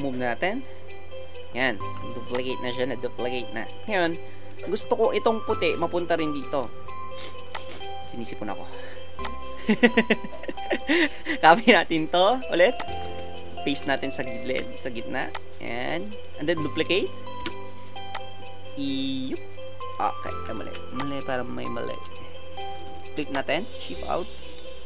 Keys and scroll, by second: 13.0 alt+Tab, 14.4 ctrl+v, 17.5 ctrl+j, 20.6 Right.